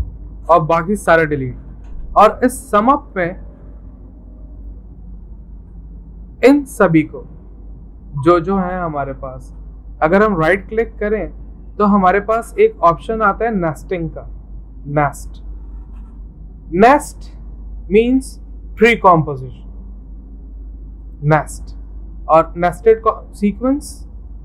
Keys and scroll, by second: 0.2 v, 1.0 Delete.